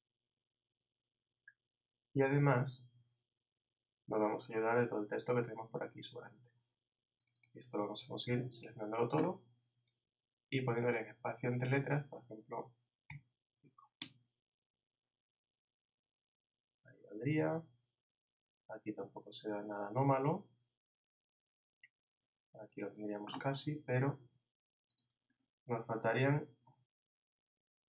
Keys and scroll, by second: 8.6 super+a.